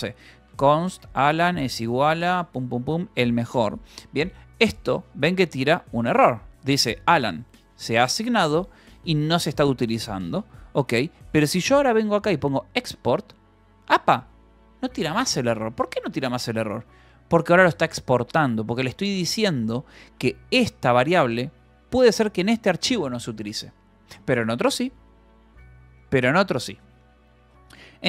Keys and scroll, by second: 0.0-3.6 typing, 4.9 k, 5.4 space, 5.6 d, 10.9 Escape, 11.1-14.1 typing, 15.4 k, 15.9 space, 16.2 d, 16.8 Escape, 17.1 j, 19.0 v, 19.6 e, 27.5 Escape.